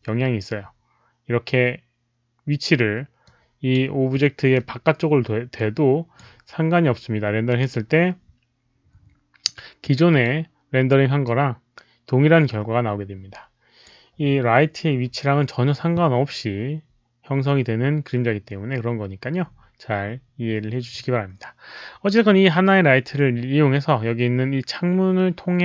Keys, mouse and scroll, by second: 3.2 click, 4.1-5.5 middle drag, 5.5 click, 7.4 click, 10.0 click, 11.2-13.8 drag.